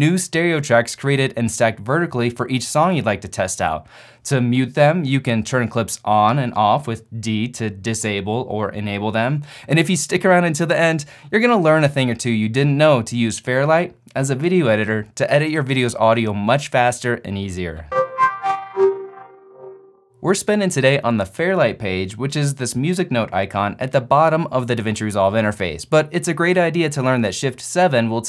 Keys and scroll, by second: 4.9 d, 7.5 d.